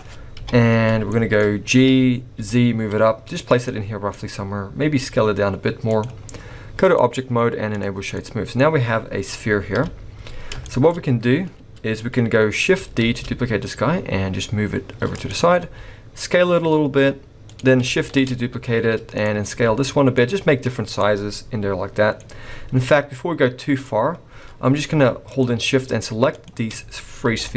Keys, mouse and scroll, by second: 0.3 KP_1, 1.1 shift+middle click, 1.4-1.8 scroll up 1, 1.8 g, 3.6 middle click, 4.1-4.8 scroll up 3, 4.9 s, 6.8 click, 8.1 middle click, 8.1 scroll down 1, 8.5-9.7 scroll up 1, 9.7 KP_1, 10.4 scroll down 4, 10.6 shift+middle click, 10.9-11.6 scroll up 1, 11.6-12.7 scroll up 3, 13.0 shift+d, 15.6 s, 18.1 shift+d, 19.5 s, 20.7 scroll down 5, 21.0 middle click, 24.2-24.8 scroll up 7, 25.2 shift+click, 26.3 shift+click, 26.7-27.2 scroll down 1, 27.2 scroll down 2, 27.2 g.